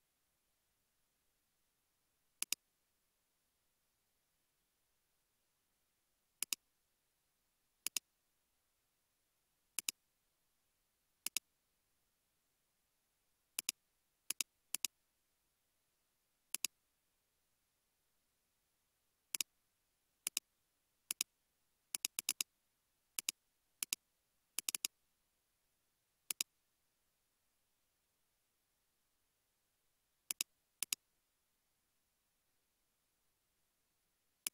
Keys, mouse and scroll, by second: 1.1 space, 14.8 double click, 17.5-19.5 scroll down 1, 22.3 double click, 22.7-24.8 scroll down 1, 24.8 double click, 28.7 shift+a, 31.7-32.7 typing, 33.8 typing.